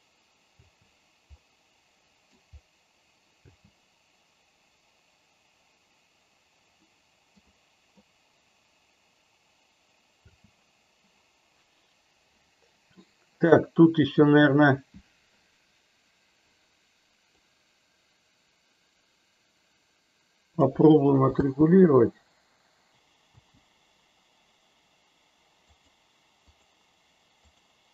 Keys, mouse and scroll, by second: 0.9 space, 1.3-2.3 middle drag, 3.4 space, 7.0 middle click, 7.7 middle click, 10.3 space, 14.2 click, 17.2-20.6 drag, 21.3 space, 22.9 space, 23.5 space, 25.8 click, 26.5 click, 27.4 click.